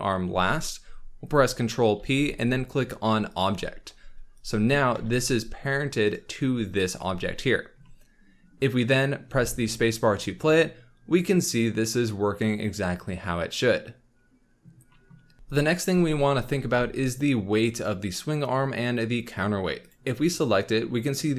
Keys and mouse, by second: 1.9 ctrl+p, 2.7-4.4 drag, 4.9 g, 9.2 space, 15.3 space, 19.8 click.